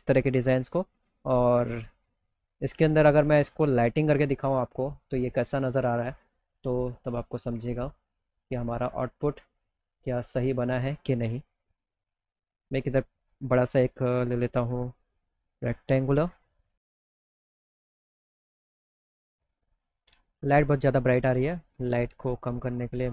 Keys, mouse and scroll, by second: 0.0 middle click, 0.3 middle click, 0.6 middle click, 0.8 alt+middle click, 1.7 middle click, 2.3 middle click, 2.6 alt+middle click, 5.1 click, 6.7 click, 7.2 click, 8.0 click, 8.7 click, 9.5 click, 11.7 middle click, 12.2-14.7 drag, 15.4 click, 16.5 click, 16.9 alt+middle click, 17.7 middle click, 18.6 click, 20.3 click, 22.6 click.